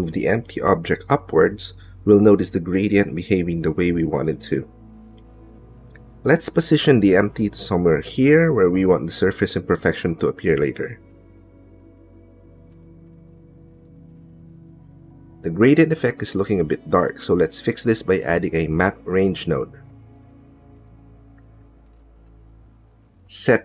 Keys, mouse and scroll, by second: 12.1 shift+click, 13.1-14.6 drag, 16.7 middle click, 17.4 middle click, 18.3 middle click, 18.9 click, 19.6 click, 19.7 shift+a.